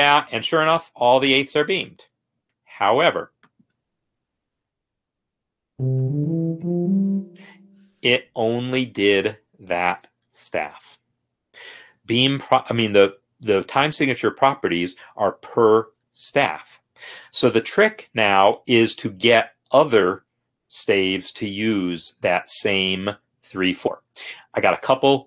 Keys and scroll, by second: 4.3 n, 5.4-6.8 typing, 7.7 Escape.